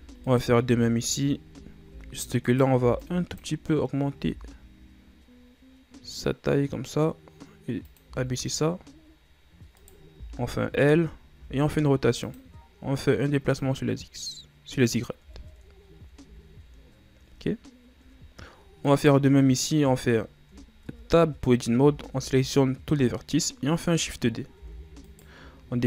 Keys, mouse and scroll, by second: 0.1 Tab, 0.4 right click, 0.7 Tab, 1.6-2.0 ctrl+scroll down 2, 2.0 z, 2.6 right click, 2.9 b, 4.3 g, 8.2 z, 9.9 right click, 10.3 l, 11.5 r, 13.7-15.4 drag, 15.4 Tab, 15.9-16.3 ctrl+scroll up 4, 16.3 a, 17.0-18.3 ctrl+scroll up 1, 18.3-18.7 ctrl+scroll up 1, 19.0 right click, 21.0 Tab, 22.0 a, 22.3 a, 24.7 shift+d.